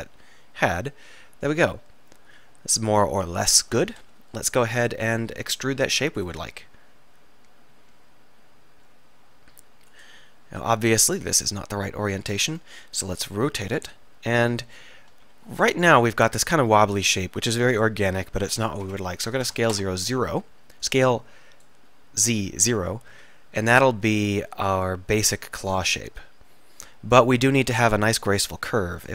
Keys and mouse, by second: 4.4 KP_3, 4.9 KP_1, 5.4 KP_3, 6.5 e, 10.0-11.3 right drag, 11.3-12.6 drag, 11.3 r, 12.7-14.7 drag, 13.0 r, 14.7 KP_1, 15.3 KP_3, 18.5 s, 20.9-23.2 drag, 23.2 s, 25.6-26.9 drag.